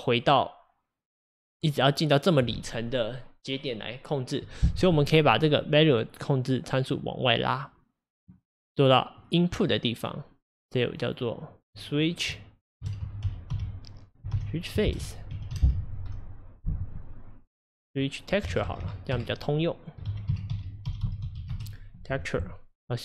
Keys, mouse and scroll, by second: 8.2 click, 9.2-21.5 drag, 21.5 BackSpace.